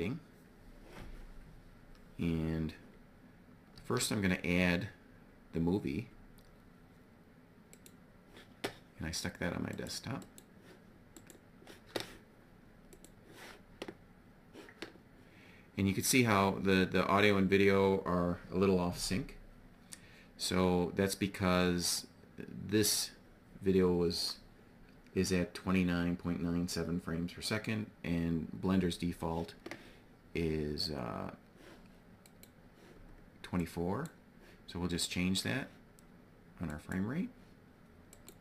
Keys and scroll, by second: 3.2 shift+a.